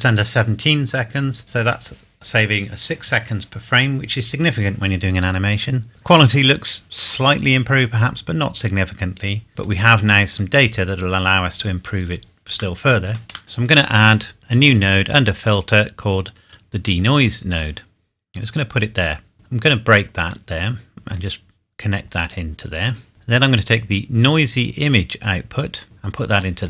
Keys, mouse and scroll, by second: 1.6-3.4 scroll up 1, 3.8-4.4 scroll up 1, 7.5-7.8 scroll down 1, 8.6 scroll up 1, 9.6 click, 12.5-13.4 scroll down 1, 13.4-14.4 scroll up 1, 14.4 click, 16.9 click, 24.4-25.1 scroll up 1, 25.8 click.